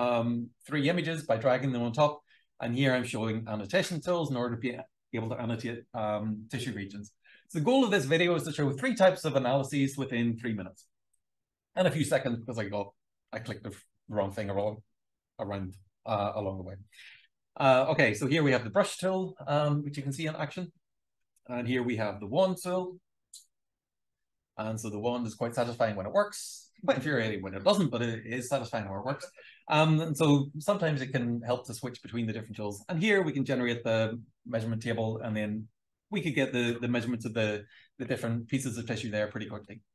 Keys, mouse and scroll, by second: 0.2 click, 0.8 click, 1.3-3.2 drag, 3.6 click, 4.2 click, 4.9 click, 5.0 b, 6.0-11.5 drag, 11.8-13.1 alt+drag, 13.4-14.6 alt+drag, 14.8 shift+scroll up 2, 15.4-16.7 alt+drag, 17.3-18.4 drag, 18.8-19.3 super+scroll down 2, 19.8-20.3 shift+scroll down 2, 21.1 w, 21.4-23.4 drag, 23.6 shift+scroll up 1, 24.3-26.6 drag, 27.2 click, 33.6 click, 33.7 click, 36.9 v, 37.6-38.0 shift+scroll up 2, 38.4-38.8 shift+scroll up 2, 39.4 click.